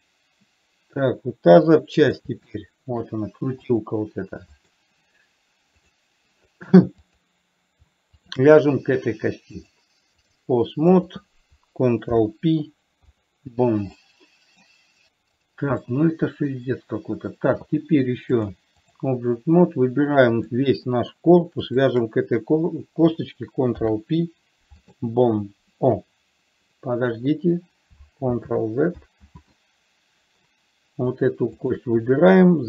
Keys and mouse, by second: 2.0-2.5 middle drag, 2.9-3.3 shift+middle drag, 4.0 click, 4.9 click, 6.4 click, 7.5 click, 8.5 shift+click, 10.0-10.8 drag, 11.3 click, 12.4 ctrl+p, 14.3 middle click, 16.3-17.3 middle drag, 18.8-19.4 drag, 20.9 click, 22.1 shift+click, 24.0 ctrl+p, 28.8 ctrl+z, 32.0 click.